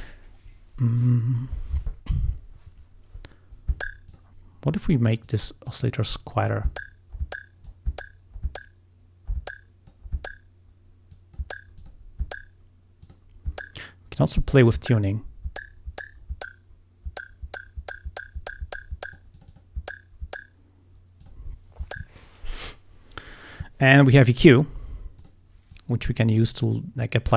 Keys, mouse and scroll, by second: 4.1 click, 5.3 click, 7.7-10.1 drag, 11.2 click, 11.8 click, 13.1 click, 14.8-19.4 drag, 19.4 click, 21.3 click, 25.2 click, 25.7-27.3 drag.